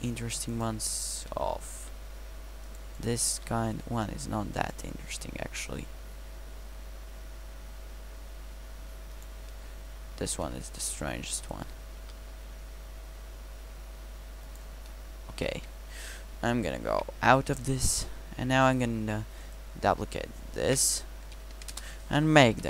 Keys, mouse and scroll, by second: 1.8 g, 3.3 g, 4.2-5.2 drag, 5.2 g, 9.5 middle drag, 10.4 middle click, 10.9-12.0 right drag, 12.0 g, 14.9 drag, 15.3 middle click, 15.4 a, 15.5 a, 16.9 Tab, 20.7 shift+d, 22.5 KP_Decimal.